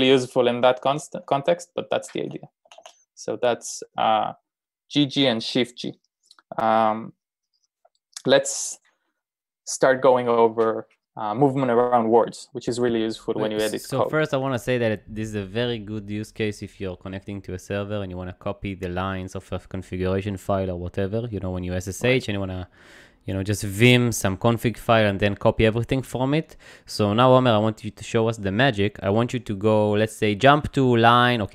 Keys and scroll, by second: 0.0-0.9 typing, 2.7-3.7 typing.